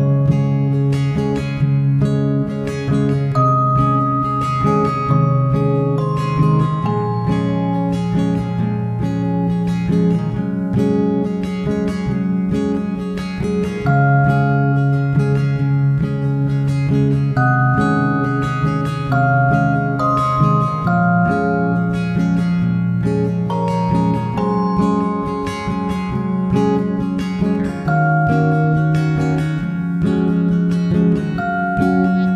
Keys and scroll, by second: 21.9 Return.